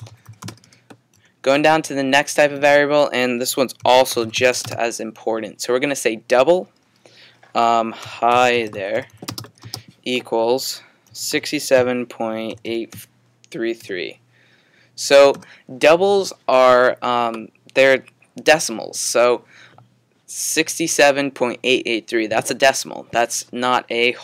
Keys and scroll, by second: 0.0-1.6 typing, 3.6-5.6 typing, 7.8-14.4 typing.